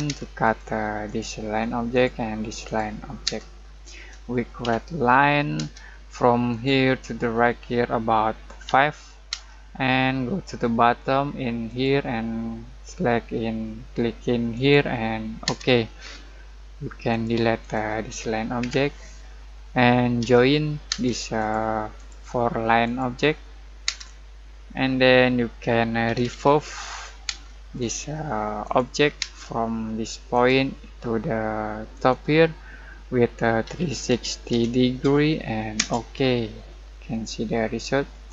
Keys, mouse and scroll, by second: 0.4 click, 1.5 scroll up 1, 1.9 click, 3.2 space, 3.6 scroll down 1, 3.9 middle click, 4.6 l, 5.5 space, 8.6 5, 9.3 space, 11.6 click, 14.5 click, 15.4 space, 17.1 click, 18.6 Delete, 20.2-20.9 typing, 21.3 click, 23.8 space, 25.8-27.2 typing, 27.8 click, 29.2 space, 30.3 click, 33.4-35.0 typing, 35.7 Return, 36.8 scroll down 1, 37.1 middle click.